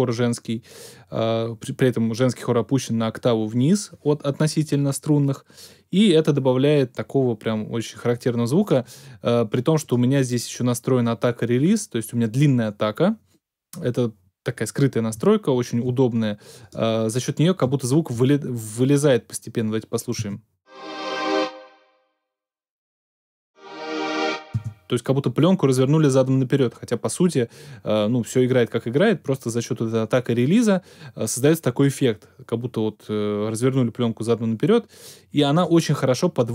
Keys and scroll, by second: 20.2 space, 24.6 space.